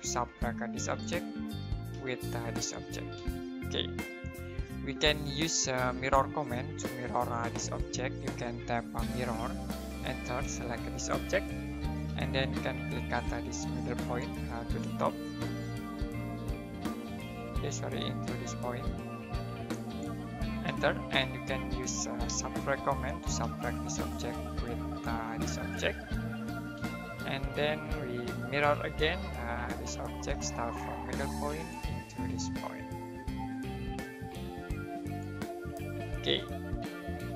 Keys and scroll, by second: 0.0-0.1 typing, 1.9 space, 3.1 typing, 8.4 typing, 9.8 space, 20.6 space, 22.2-23.4 typing, 25.0 space, 28.1-29.2 typing, 30.3 space, 35.5 space.